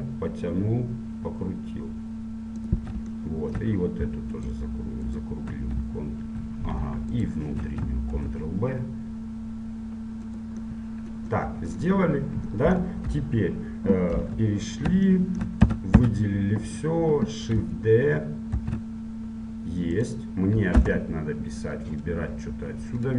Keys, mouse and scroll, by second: 3.3-4.5 middle drag, 4.5-10.4 right drag, 8.3 ctrl+b, 10.9-14.5 middle drag, 13.3 KP_1, 14.5 KP_7, 15.3-18.7 middle drag, 15.7 a, 16.2 a, 18.7 shift+d.